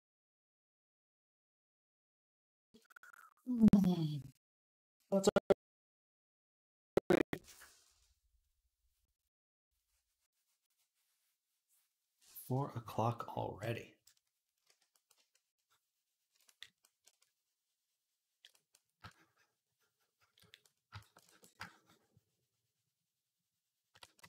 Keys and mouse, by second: 14.4 d, 15.2-24.2 shift+drag, 15.2-23.7 shift+middle drag.